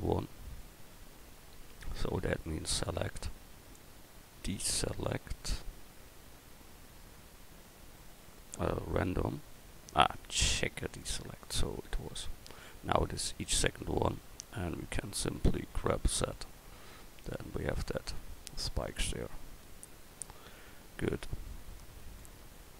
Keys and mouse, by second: 2.7-4.5 drag, 15.8 g, 19.3 Tab.